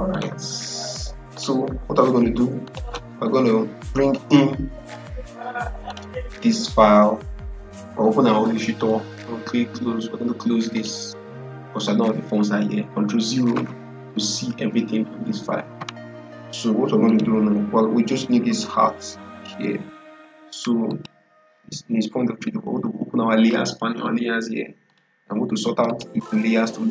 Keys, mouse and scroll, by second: 0.0 click, 5.8 click, 10.6 click, 13.4 ctrl+0, 14.4 ctrl+0, 16.9 click, 20.8 click, 24.8-26.9 drag.